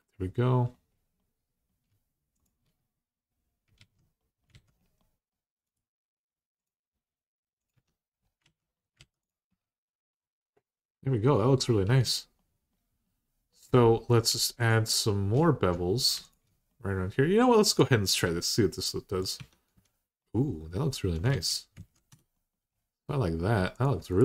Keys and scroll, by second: 3.6 alt+z, 4.3 alt+z, 7.5 Tab, 8.2 alt+z, 9.4 alt+z, 11.6 Tab, 19.2 Tab, 21.1 alt+z, 21.6 alt+z, 21.9 Tab.